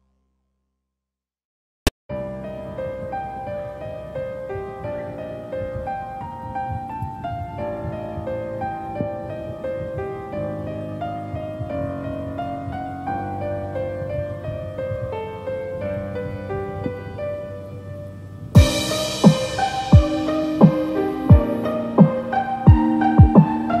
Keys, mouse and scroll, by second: 5.6 right click, 5.9 scroll down 4, 6.2 middle click, 6.7 scroll up 4, 6.9 middle click, 7.4 scroll down 1, 7.5 scroll up 1, 7.6 middle click, 9.3-9.6 scroll down 4, 9.9 middle click, 10.4 scroll up 4, 10.6 middle click, 11.1 middle click, 11.5 click, 11.8 middle click, 13.2 click, 14.5 click, 16.5 click, 17.1 scroll down 2, 17.4 middle click, 18.4 click, 18.8 click, 19.9 click, 20.6 click, 22.3 middle click, 23.3-23.8 scroll up 5.